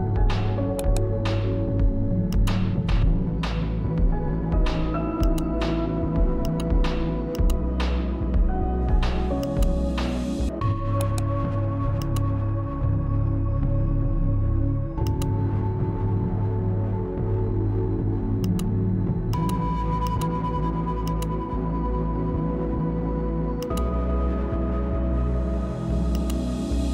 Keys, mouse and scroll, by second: 0.2-1.7 right drag, 1.7-4.7 shift+drag, 8.5-10.2 drag, 10.2 right click, 11.1-14.3 shift+drag, 17.4 click, 24.6 click.